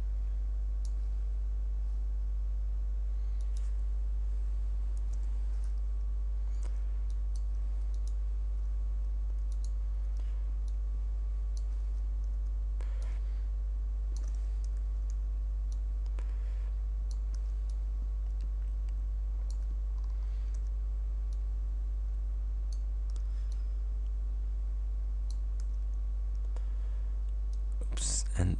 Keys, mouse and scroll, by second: 3.5 click, 5.2 Delete, 7.2 click, 8.0 shift+click, 9.6 shift+click, 10.7 click, 13.1-14.5 drag, 15.1 ctrl+d, 15.8-17.4 ctrl+drag, 17.4 ctrl+d, 17.7-19.7 ctrl+drag, 20.0-20.5 ctrl+scroll down 3, 20.6 ctrl+d, 21.3-23.0 ctrl+drag, 23.1 ctrl+d, 23.6-25.5 ctrl+drag, 25.7 ctrl+d, 27.5-28.5 drag.